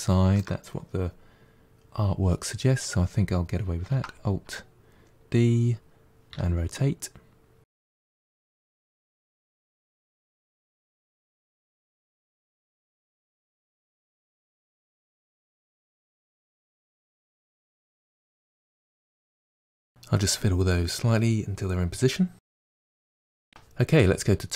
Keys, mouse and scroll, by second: 3.8 alt+d, 7.8 middle click, 9.0-12.2 typing, 9.3 middle click, 9.8 click, 11.7 middle click, 12.1 click, 12.4 middle click, 13.6 middle click, 13.7 r, 13.9 middle click, 14.2 KP_1, 15.0 middle click, 15.0 click, 15.8-18.6 typing, 16.2 middle click, 16.5 click, 17.5 click, 17.7 middle click, 19.2 middle click, 20.0 s, 20.8 middle click, 20.9 click, 21.0 middle click, 21.4 KP_1, 21.8 click, 21.9 middle click, 22.3 r, 22.7 middle click.